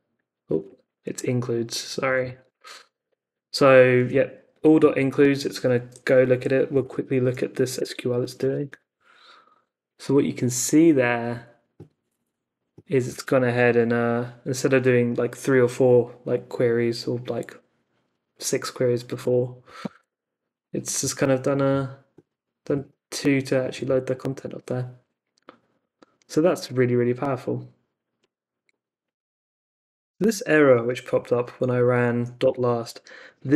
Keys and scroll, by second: 0.4 Up, 0.6 Left, 2.4 s, 6.8 super+k, 7.7 Return, 31.1 Up, 32.4 Return.